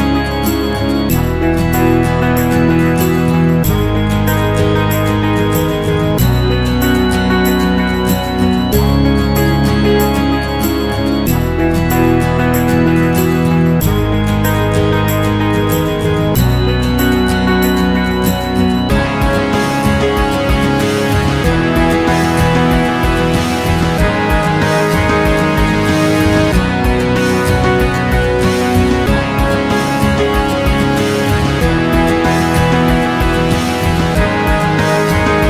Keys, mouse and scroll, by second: 0.1-4.6 alt+drag, 4.6 alt+right click, 4.8 alt+click, 4.9 alt+middle click, 5.0 alt+click, 5.3 alt+middle click, 5.4 alt+click, 5.5 alt+middle click, 5.6-10.5 alt+drag, 10.5 alt+middle click, 10.7 alt+click, 10.8 alt+middle click, 10.9 alt+click, 11.6 ctrl+z, 11.7 alt+click, 11.8 alt+right click, 11.9 alt+click, 12.4 ctrl+z, 12.5 alt+click, 12.7 m, 12.8-15.0 drag, 15.0 shift+b, 15.2 alt+click, 15.4 alt+middle click, 15.5-16.7 alt+drag, 16.9-18.5 alt+drag, 18.5 alt+middle click, 18.6-20.7 alt+drag, 20.7 alt+middle click, 20.7 alt+click, 20.9 alt+middle click, 21.0-22.1 alt+drag, 22.1 alt+middle click, 22.2-24.7 drag, 24.7 alt+middle click, 24.8 alt+click, 25.0 alt+middle click, 25.3 alt+m, 25.5 alt+right click, 25.6-28.5 alt+drag, 28.5 alt+middle click, 28.6-31.9 alt+drag, 31.9 alt+middle click, 32.1-33.4 drag, 33.4 alt+right click, 33.5-35.1 alt+drag, 35.1 alt+middle click, 35.2-35.4 alt+drag.